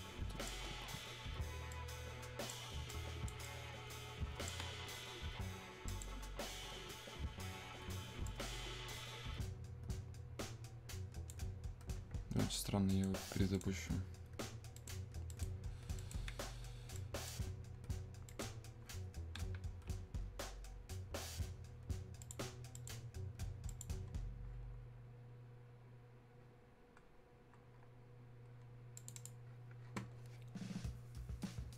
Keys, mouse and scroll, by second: 1.7-5.9 drag, 8.3-12.9 ctrl+drag, 15.7 super+Num_Lock, 15.7-18.3 drag, 22.3 click, 31.4 click.